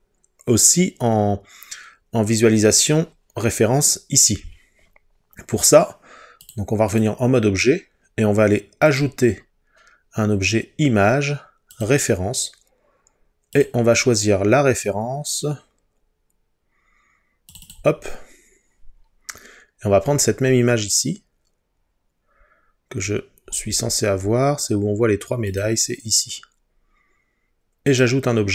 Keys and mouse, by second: 6.6 click, 9.1-11.9 drag.